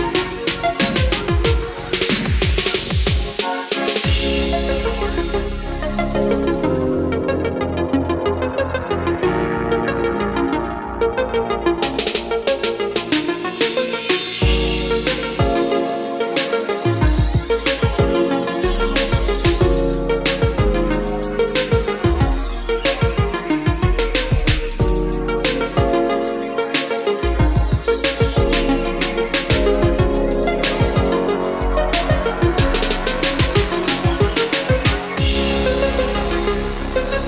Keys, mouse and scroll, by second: 3.2-3.9 scroll up 1, 5.6-7.5 scroll down 1, 7.5-9.4 drag, 11.7-12.7 scroll down 1, 12.7-13.1 scroll up 1, 14.0 scroll down 1, 15.8-28.3 drag, 28.3-29.1 scroll down 1, 29.5 scroll up 1, 31.9-33.7 drag, 36.6-37.2 scroll down 1.